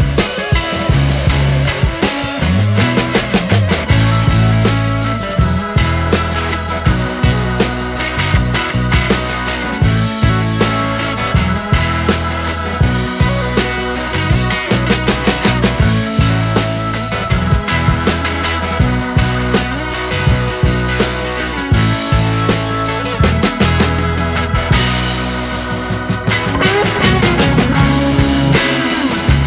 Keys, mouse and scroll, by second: 0.3-1.3 scroll up 1, 1.3-6.7 drag, 6.7-7.2 scroll down 5, 7.2 click, 9.5 ctrl+t, 12.2-14.1 middle drag, 14.1 drag, 17.2 scroll down 2, 17.5 click, 23.4 right click, 27.3-29.3 right drag, 29.4 right click.